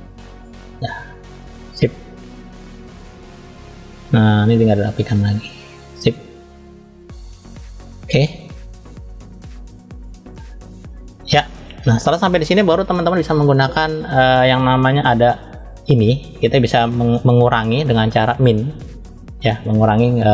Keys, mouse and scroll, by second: 0.6 click, 1.5 middle click, 2.6 click, 3.8 middle click, 4.7 click, 6.3 middle click, 7.8-9.3 drag, 9.9-11.6 middle drag, 14.9 click, 20.1-20.3 middle drag.